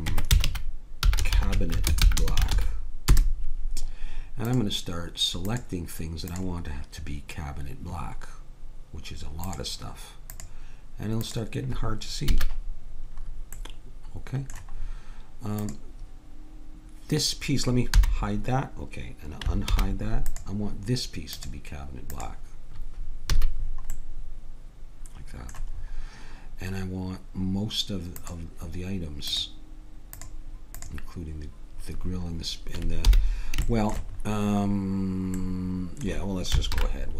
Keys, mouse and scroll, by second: 4.5-8.8 drag, 9.5-12.0 drag, 12.3 a, 18.0 h, 19.7 alt+h, 23.3 a, 28.2-29.3 drag, 32.1 middle click, 33.1 h, 36.7 alt+h.